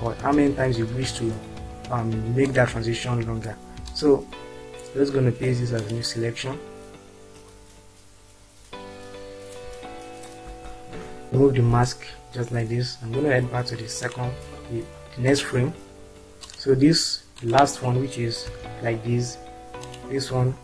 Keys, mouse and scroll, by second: 0.4 ctrl+c, 11.8 ctrl+r, 18.6 click.